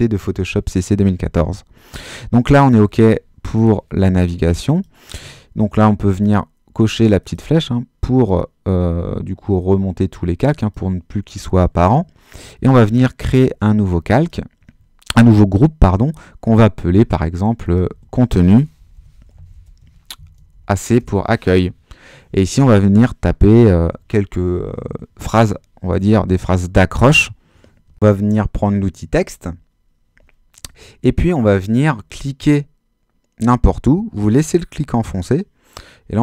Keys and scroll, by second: 17.9-20.9 typing, 21.0 Return.